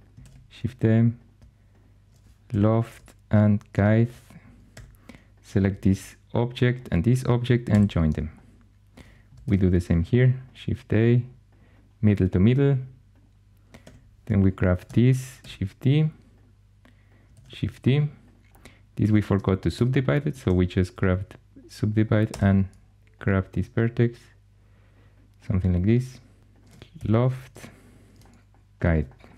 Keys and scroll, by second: 0.1 shift+d, 2.4 l, 4.6 4, 7.6 j, 9.3 shift+a, 13.7 2, 15.3 shift+d, 17.2 shift+d, 19.6 shift+s, 20.3 1, 22.2 g, 26.4 2, 26.8 1.